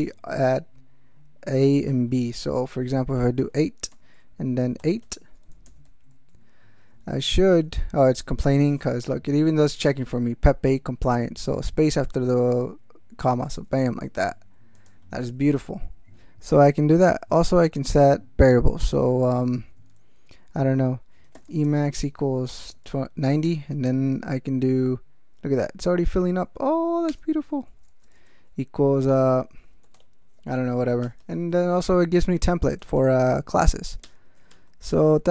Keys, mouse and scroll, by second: 3.4-5.5 typing, 5.9 ctrl+shift+s, 7.0 ctrl+b, 13.3 space, 13.9 ctrl+x, 14.0 ctrl+s, 14.8 click, 17.1 Return, 21.0-24.1 typing, 23.4 Return, 27.1 Return, 27.9 space, 28.0 =, 28.1 space, 29.6-30.5 typing, 31.0 Return, 32.6-33.7 typing, 34.0 Return, 34.5 Tab.